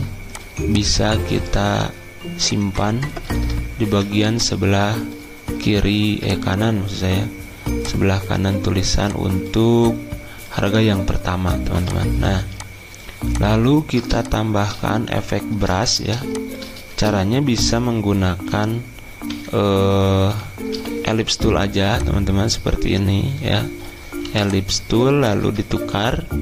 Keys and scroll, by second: 3.9 ctrl+g, 19.3 n, 20.7 l, 24.3 v, 25.8 x.